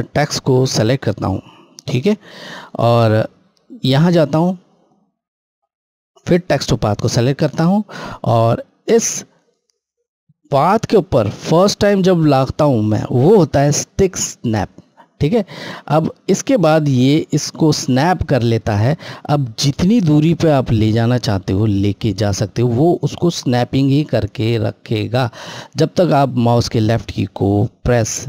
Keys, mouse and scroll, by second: 1.2-1.5 scroll, 2.2-3.7 scroll down 1, 3.7 click, 6.3 click, 8.2 scroll, 8.3-9.2 scroll up 1.